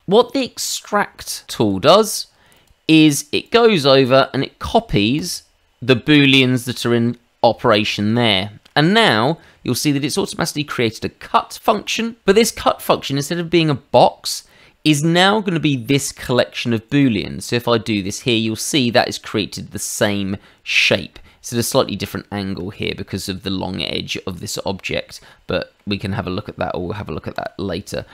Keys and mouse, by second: 0.7 click, 1.6 click, 2.5 click, 3.4 click, 5.1 click, 8.3 shift+middle click, 16.9 click, 25.1 middle click, 27.3 click, 27.9 middle click.